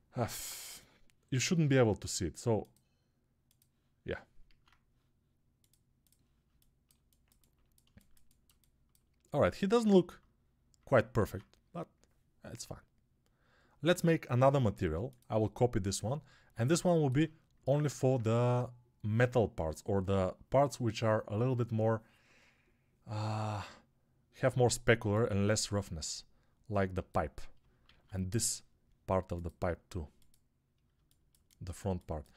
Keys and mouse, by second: 0.2 ctrl+Tab, 3.3-5.4 drag, 3.3-5.4 middle drag, 4.4 alt+q, 11.1 alt+q, 17.7 alt+q, 28.0 alt+q.